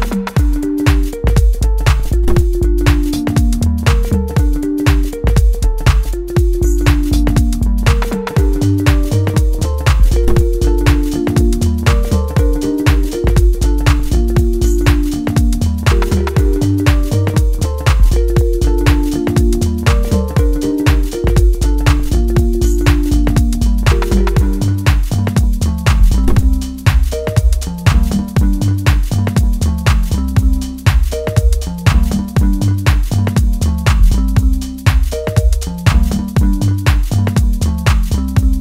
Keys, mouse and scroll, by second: 2.4-7.9 drag, 9.4-9.9 scroll down 1, 9.9 middle click, 11.2-11.9 scroll down 2, 11.9 shift+middle click, 12.5-13.0 scroll up 2, 13.0 shift+middle click, 14.2-15.0 scroll up 1, 15.0-22.4 drag, 22.4-23.0 scroll up 2, 23.0 shift+middle click, 23.8 scroll up 1, 24.4-26.7 middle drag, 26.7-33.4 drag, 33.4-34.1 scroll down 1, 34.1-36.1 middle drag, 36.1 click, 37.3-37.7 scroll down 1, 37.8-38.6 middle drag.